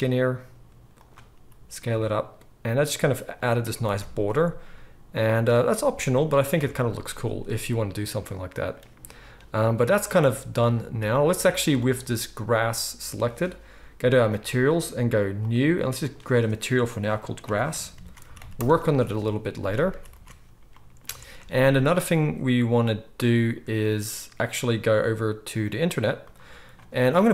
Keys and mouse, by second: 1.3 s, 3.9 Tab, 6.7 alt+a, 14.2 click, 14.3-15.3 middle drag, 15.3-27.3 drag, 18.3 s, 19.9 ctrl+s, 20.1 ctrl+s, 21.1 alt+a.